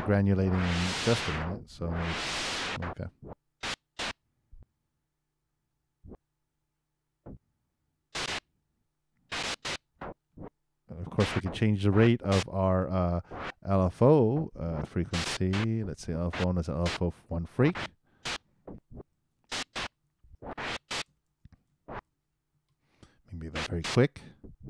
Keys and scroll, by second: 2.1 super+2, 2.6 super+Return.